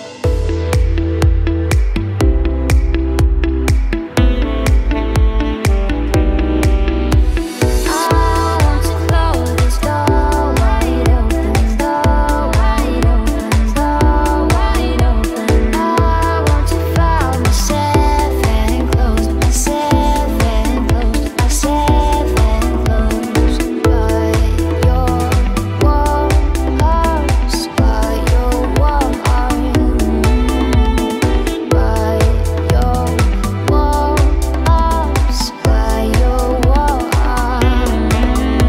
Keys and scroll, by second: 5.7 Delete.